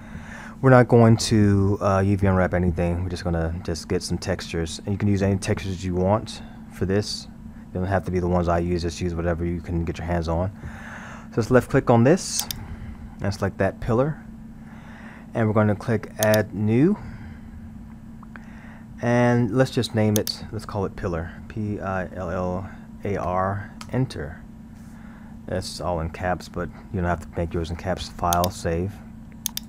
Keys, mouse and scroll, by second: 12.5 click, 13.4 scroll, 16.3-19.3 drag, 20.2-22.3 drag, 22.3 l, 28.4-29.6 drag.